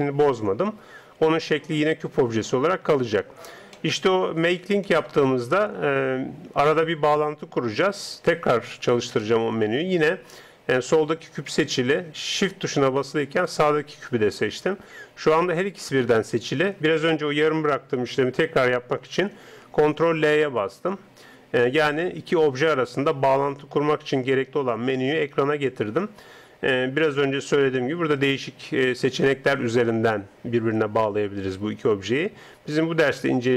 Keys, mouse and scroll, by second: 4.9-13.5 middle drag, 13.5-15.1 right drag, 20.0 ctrl+l.